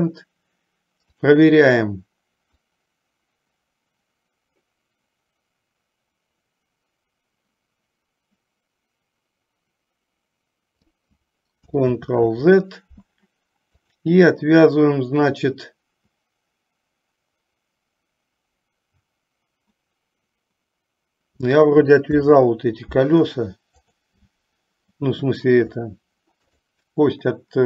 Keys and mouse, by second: 2.8-11.3 drag, 12.1 ctrl+z, 14.0 click, 22.2 alt+p, 26.7 drag.